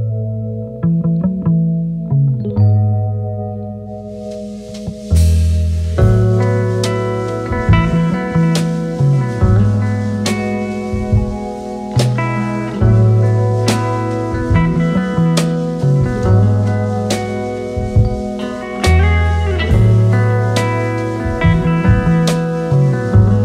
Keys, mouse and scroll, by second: 4.9-5.2 alt+scroll up 2, 5.2 space, 5.7 space, 6.2 alt+scroll up 1, 6.4 space, 6.9 space, 7.4 alt+scroll up 1, 11.7 ctrl+a, 11.8-13.0 typing, 14.0-15.2 typing, 17.9 shift+click, 20.0 alt+click, 20.9 ctrl+z, 21.9 alt+click.